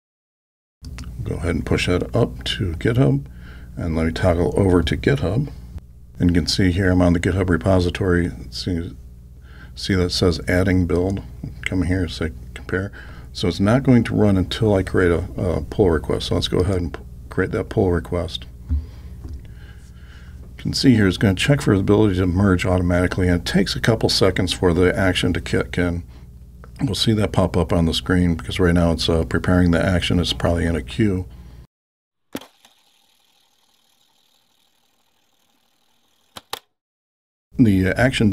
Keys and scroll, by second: 0.2 alt+super+k.